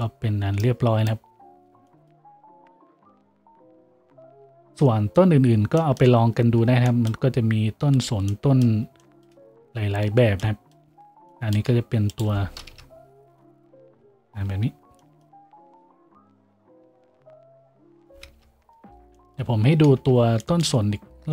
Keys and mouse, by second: 0.8-21.3 drag, 12.7 KP_Decimal, 13.5 a, 18.3 KP_Decimal, 20.2 a.